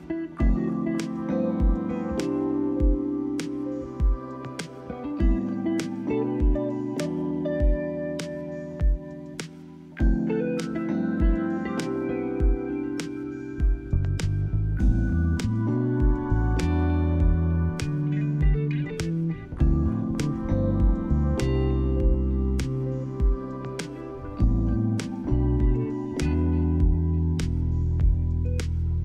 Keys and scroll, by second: 3.5 ctrl+-, 7.4 space, 17.0 ctrl+=.